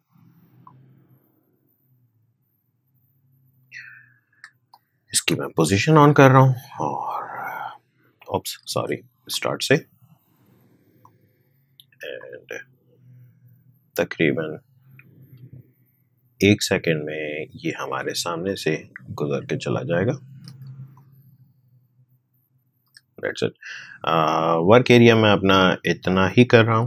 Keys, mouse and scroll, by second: 5.1 p, 6.6 click, 8.7 ctrl+z, 9.2-20.9 drag, 20.9-25.2 drag, 25.5 click, 26.6 n.